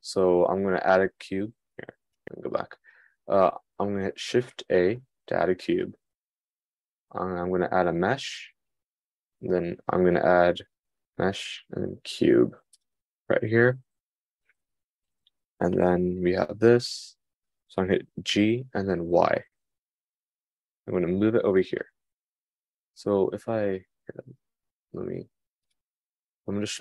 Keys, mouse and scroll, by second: 2.0 r, 2.4 r, 5.5 shift+a, 18.8 g.